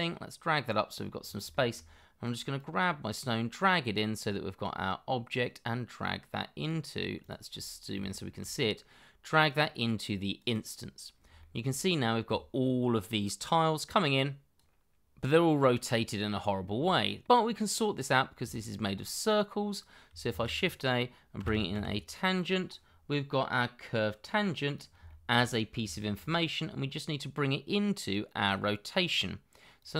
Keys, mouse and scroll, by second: 1.1 scroll down 1, 1.5 shift+middle click, 7.5-7.9 scroll up 1, 8.0 shift+middle click, 10.9 scroll down 1, 11.4 shift+middle click, 15.0 double click, 16.9 shift+middle click, 18.1 scroll down 1, 18.5 shift+middle click, 20.3 shift+a, 21.3 t, 21.5 a, 21.7 n, 25.0 shift+middle click, 25.4-25.8 scroll up 1, 25.8 shift+middle click.